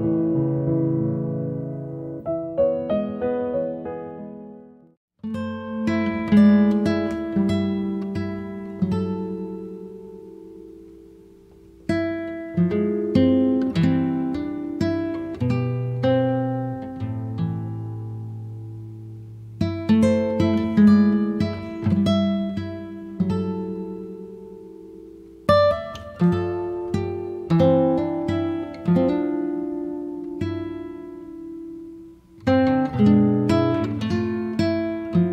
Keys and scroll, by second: 7.6-9.3 typing, 9.4 Return.